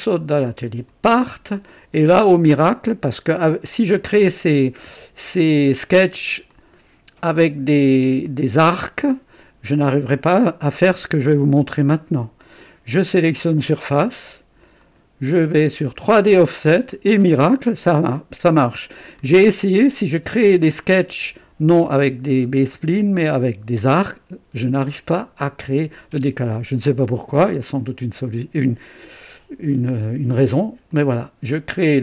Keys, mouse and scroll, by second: 1.0 click, 1.9-3.8 drag, 4.2-5.5 drag, 6.5 click, 8.2 right click, 14.7 click, 15.9 click, 16.7-17.0 scroll up 2, 17.2 right click, 18.1-19.4 drag, 30.8 click.